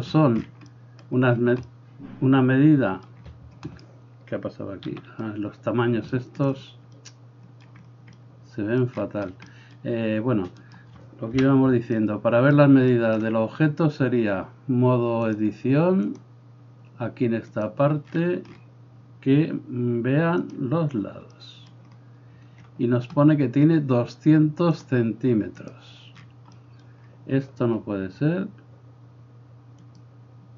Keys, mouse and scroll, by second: 3.7-10.7 drag, 4.9 x, 10.7-15.3 middle drag, 11.4 KP_1, 15.3-30.1 drag, 30.1-30.5 middle drag.